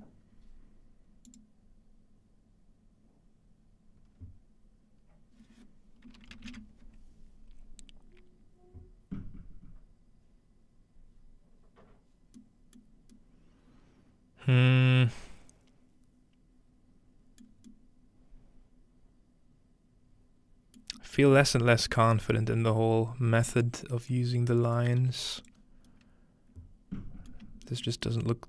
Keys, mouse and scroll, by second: 1.2-3.1 drag, 12.3-21.0 middle drag, 13.0-13.9 scroll up 2, 13.9-14.9 scroll up 1, 16.6-17.4 scroll up 2, 17.4-20.3 scroll up 1, 22.5-23.5 middle drag, 22.7-24.1 scroll down 1, 23.7-24.8 middle drag, 24.1-27.3 drag, 25.0 g, 27.4 shift+middle drag, 27.9 middle click.